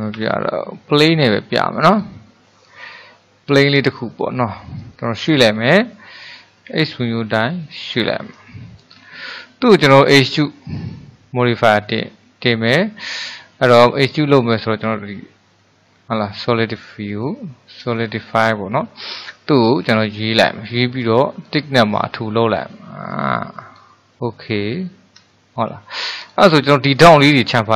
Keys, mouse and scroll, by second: 0.2 Delete, 2.0-5.0 drag, 5.6 g, 8.3-9.0 middle drag, 9.0-9.6 scroll up 3, 9.6 shift+middle click, 10.1 click, 10.5 click, 11.5-14.7 drag, 18.0-21.5 shift+middle drag, 21.5-24.2 drag, 24.2-24.8 middle drag, 24.8-25.4 scroll up 2, 25.4-26.3 shift+middle drag, 26.3 click.